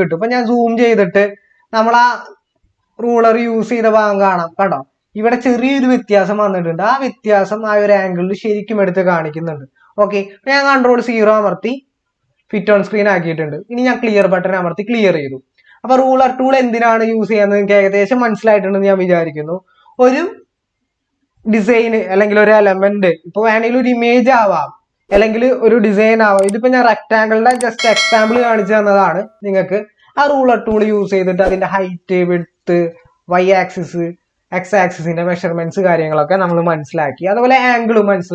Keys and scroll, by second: 11.1 ctrl+0.